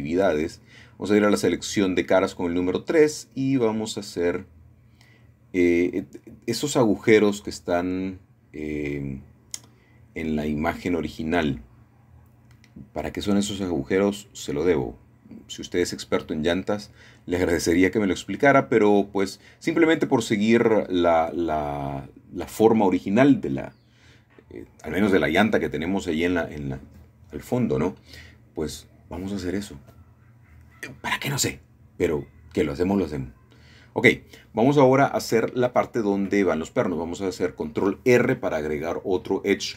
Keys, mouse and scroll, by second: 0.9 shift+middle click, 3.6 3, 5.4 click, 8.0 shift+click, 9.1 shift+click, 9.9 shift+click, 10.7 shift+click, 11.5 shift+click, 11.9 middle click, 12.7-14.0 shift+middle drag, 14.0-17.0 shift+drag, 17.3-18.4 shift+drag, 19.3 shift+click, 20.2 shift+click, 21.0 shift+click, 21.7 shift+click, 24.1 middle click, 26.1 x, 28.4 click, 29.1-29.6 scroll down 1, 29.6-31.5 shift+middle drag, 34.4-35.1 scroll up 2, 35.1 shift+middle click, 37.4 ctrl+r, 38.0-39.5 drag.